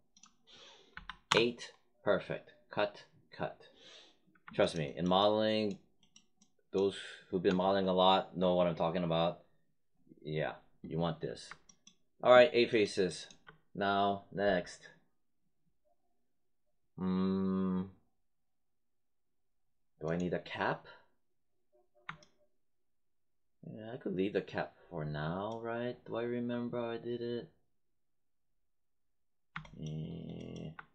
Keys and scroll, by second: 0.9 8, 1.2 Return.